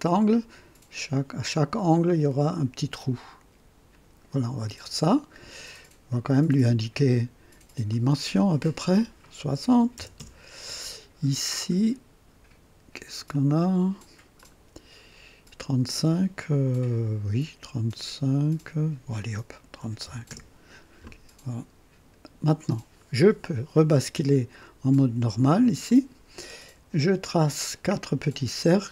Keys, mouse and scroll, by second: 3.9 click, 5.1 right click, 6.7 click, 7.9 click, 9.7 KP_6, 9.9 KP_0, 10.1 KP_Enter, 13.3 click, 14.4 click, 19.8 KP_3, 20.0 KP_5, 20.3 KP_Enter, 25.8 click, 27.3 click.